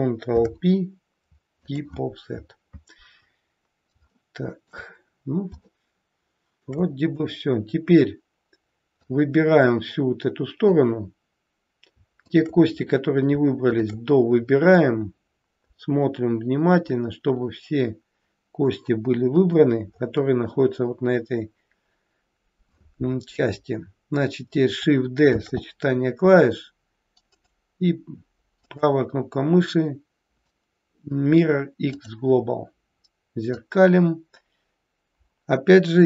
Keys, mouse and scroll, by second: 0.2 ctrl+p, 3.4-4.0 scroll down 2, 4.1 shift+middle click, 5.1-5.5 scroll down 1, 5.6 shift+middle click, 7.2-8.1 scroll down 1, 8.1-8.6 scroll down 1, 9.1 click, 12.2 shift+click, 12.9-13.2 scroll up 4, 13.6 shift+click, 14.4-15.4 scroll down 5, 14.9 middle click, 19.4 KP_1, 19.9-21.5 scroll up 3, 21.5-22.2 scroll down 1, 25.4 shift+d, 33.5 click.